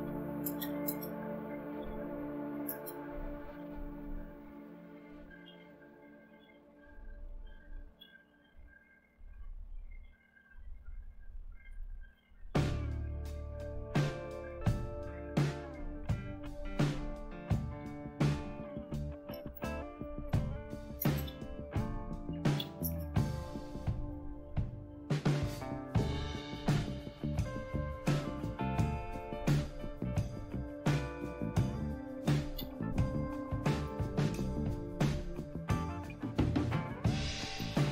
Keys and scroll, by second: 0.0-3.0 typing, 4.6-8.4 typing, 11.7 Return, 17.5-24.9 typing, 26.9 typing, 29.3-32.6 typing, 33.9 Return, 37.2-37.9 typing.